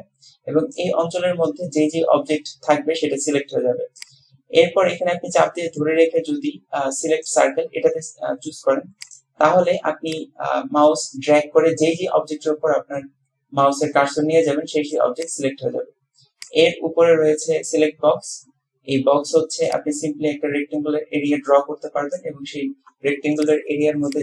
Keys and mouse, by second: 4.0-7.4 drag, 9.2 click, 10.3-15.0 drag, 15.4 click, 16.6-17.9 drag, 19.8-22.4 drag, 23.4 click.